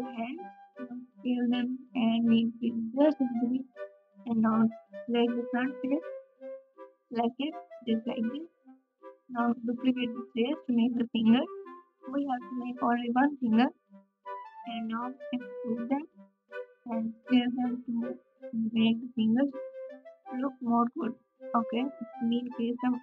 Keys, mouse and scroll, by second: 7.7 g, 8.5 s, 8.5 e, 12.7 KP_Subtract, 19.1 alt+z, 20.4-23.0 shift+drag.